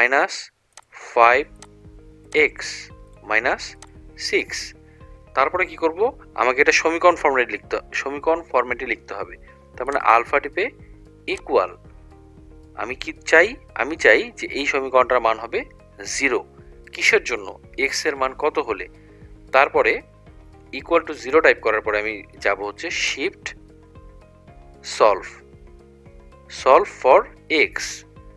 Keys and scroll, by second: 0.8 5, 2.3 ), 3.2 -, 3.8 6, 14.7 0.